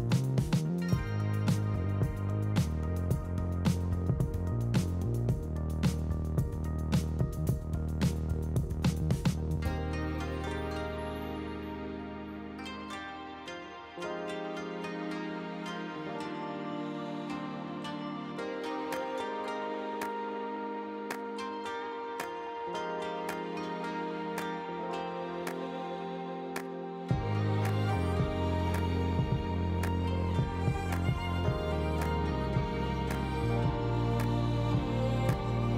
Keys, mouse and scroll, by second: 0.1 click, 0.7 ctrl+s, 1.0 click, 2.1 click, 2.3 q, 3.1 click, 3.6 ctrl+z, 3.7 q, 4.2 click, 4.8-5.1 drag, 7.2 click, 7.3 click, 7.5 q, 7.9 click, 8.4 ctrl+z, 8.5 click, 10.4 click, 11.0 click, 13.0 click, 13.1 click, 15.1 g, 15.8 click, 16.0 z, 16.3 middle click, 16.7 click, 17.2 ctrl+p, 17.5-19.3 typing, 18.0 click, 20.2 click, 20.5 shift+], 20.6 h, 20.7 ctrl+s, 20.7 z, 21.2 alt+h, 21.3 click, 21.4 g, 22.5 shift+right click, 22.6 shift+a, 23.1 g, 24.2 click, 25.6 click, 26.1 z, 26.8 click, 27.0 h, 27.6 scroll down 1, 27.7 click, 27.9 click, 29.2 click, 29.3 KP_0, 30.8 z, 30.9 scroll down 3, 31.0 ctrl+s, 31.1 scroll up 5, 31.2 scroll down 1, 31.5 click, 32.0 click, 32.4 KP_0, 32.6 ctrl+s, 32.9 click, 33.1 click, 33.5 ctrl+s, 33.8-34.3 scroll up 1, 35.3 ctrl+s, 35.4 middle click, 35.6 scroll down 5.